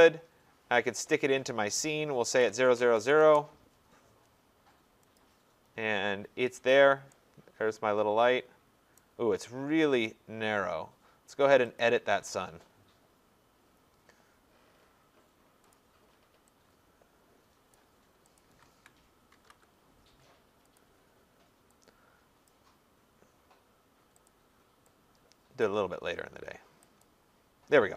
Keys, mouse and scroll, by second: 2.1-3.5 typing, 4.8-5.2 typing, 5.2 click, 6.7 click, 9.0 right click, 11.8 click, 15.8 click, 17.7 click, 18.2-19.3 typing, 18.4 click, 20.8 click, 22.5 click, 24.3 click, 25.6 click, 27.0 click.